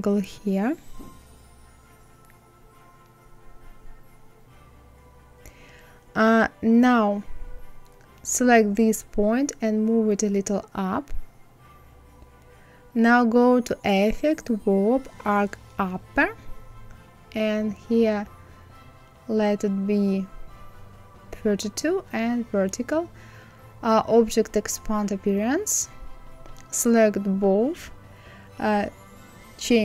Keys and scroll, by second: 9.2 Up, 10.7 Up.